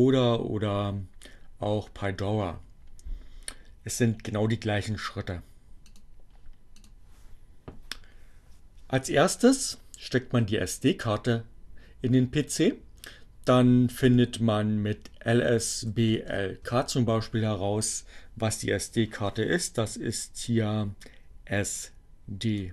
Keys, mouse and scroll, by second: 3.9 click, 6.6 click, 13.7-16.8 typing, 21.8 click.